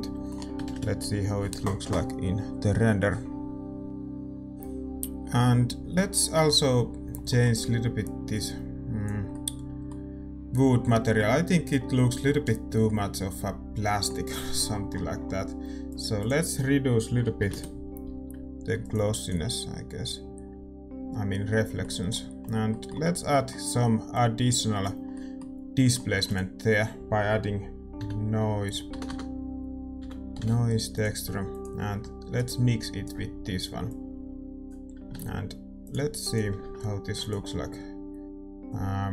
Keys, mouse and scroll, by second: 0.3-3.8 middle drag, 3.8 ctrl+s, 8.6-12.7 drag, 9.5-12.7 middle drag, 13.1-17.5 middle drag, 17.5-20.7 drag, 20.7 ctrl+s, 20.7-33.0 middle drag, 24.4-33.0 drag, 33.0-34.4 right drag, 34.0-35.9 drag, 35.9-38.5 drag, 38.5 ctrl+s.